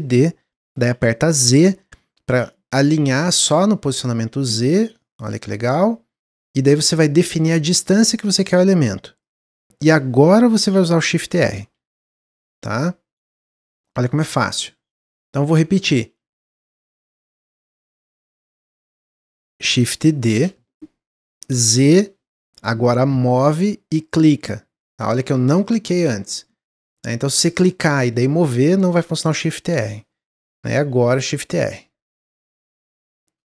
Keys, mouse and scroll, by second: 11.2-13.6 typing, 15.4-16.6 ctrl+z, 16.7-17.1 ctrl+z, 18.4 ctrl+z, 20.2 shift+d, 31.0 shift+r, 31.3-32.3 shift+r, 32.5 shift+r, 33.3 click.